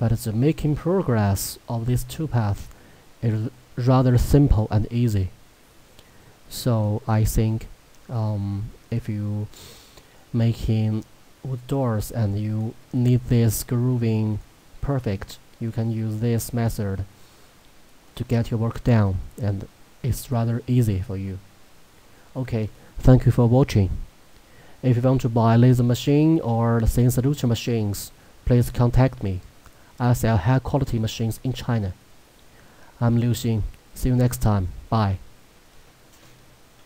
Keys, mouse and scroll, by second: 28.6-32.3 middle drag.